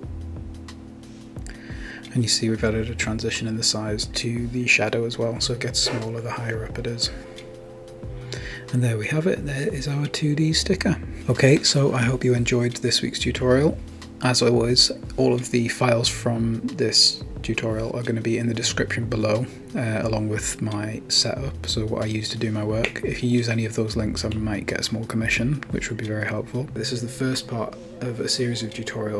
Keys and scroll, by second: 9.3 Right, 9.4 Right, 10.0 typing, 10.4 Return.